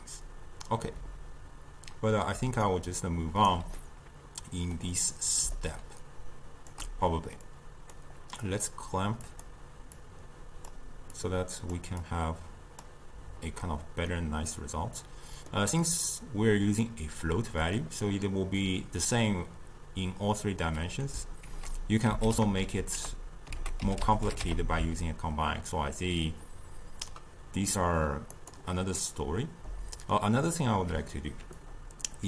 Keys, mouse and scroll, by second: 2.4 d, 2.7 right click, 3.6 d, 3.8-5.6 middle drag, 5.6-14.2 shift+drag, 14.2-20.9 middle drag, 21.5 ctrl+a, 29.7-31.7 middle drag, 31.7-32.2 drag.